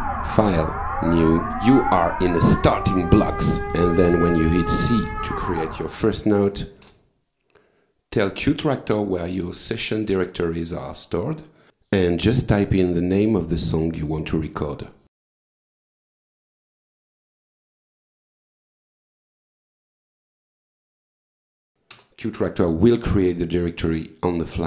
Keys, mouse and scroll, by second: 3.6 click, 5.7 c, 8.0 click, 9.7 click, 10.6 click, 15.5-18.0 typing, 19.0 ctrl+c, 19.7 shift+Tab, 20.9 ctrl+v, 21.9 Return.